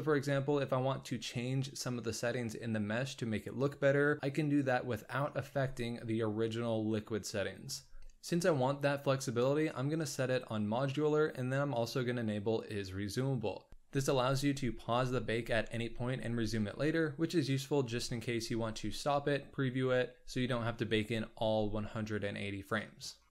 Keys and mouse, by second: 4.5 click, 12.7 click.